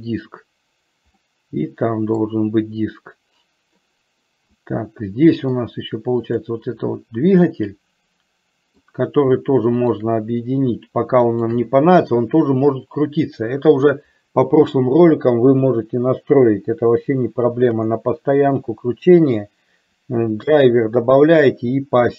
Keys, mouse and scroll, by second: 1.4-2.5 middle drag, 4.7-5.8 middle drag, 6.6 click, 7.6-9.1 middle drag, 11.4 shift+click.